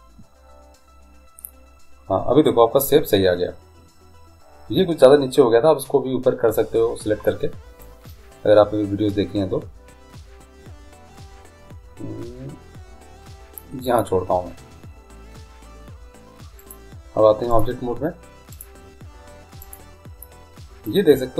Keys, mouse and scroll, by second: 16.8 click, 17.8 click, 18.7-20.4 drag.